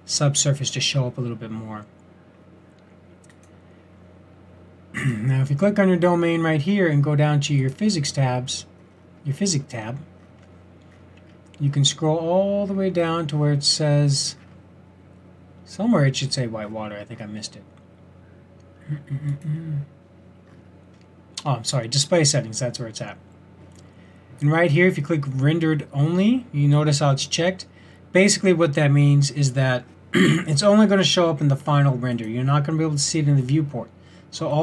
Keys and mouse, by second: 9.9-19.3 middle drag, 25.1-30.2 middle drag, 32.2 click, 33.1 drag.